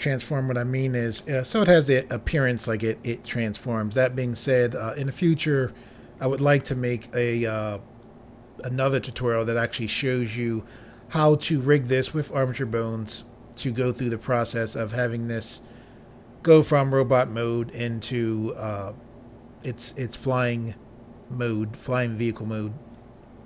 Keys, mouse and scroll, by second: 1.1 middle click, 8.0 click, 9.7 middle click.